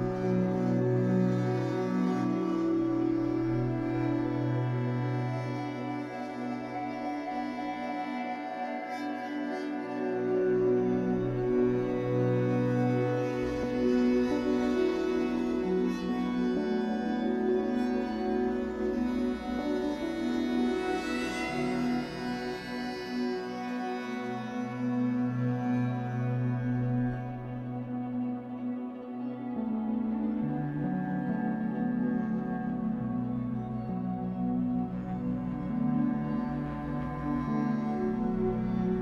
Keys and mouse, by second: 4.5 click, 6.9 space, 8.1 shift+click, 9.7 click, 10.0 space, 13.5-14.5 shift+drag, 15.5 click, 16.6 space, 18.0 drag, 19.5-20.9 shift+drag, 21.7 click, 25.1 space, 25.7-26.8 alt+drag, 27.3-28.1 alt+drag, 29.8 click, 31.0-31.3 drag, 31.4-32.2 drag, 35.8-37.5 shift+drag, 38.3 click.